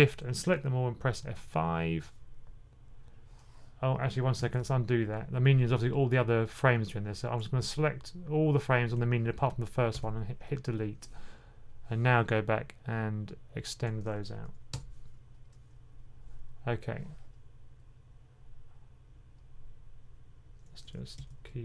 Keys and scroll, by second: 1.1 F5, 4.3 super+z, 14.6 F5, 21.0 F6.